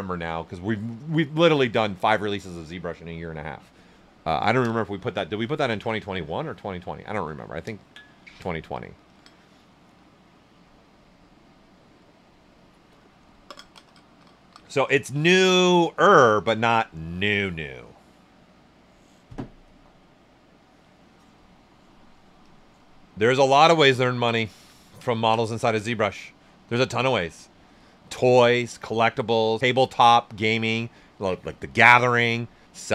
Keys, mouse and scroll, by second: 22.1 click, 23.3 alt+right click, 23.8 ctrl+alt+right click, 24.7 ctrl+right click.